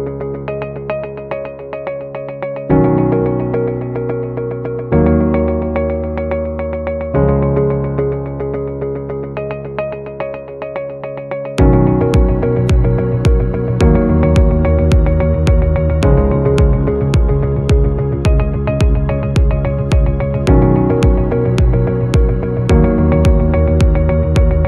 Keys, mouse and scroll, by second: 0.6 shift+click, 1.3 shift+click, 2.0 shift+click, 5.9-6.6 scroll down 1, 13.4 double click, 18.5-19.4 scroll up 1.